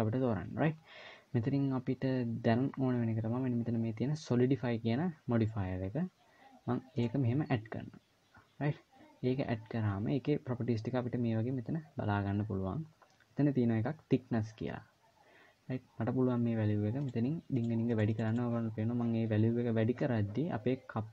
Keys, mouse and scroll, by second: 16.7 click, 17.3 click, 17.6 click, 17.8 click, 18.0 click.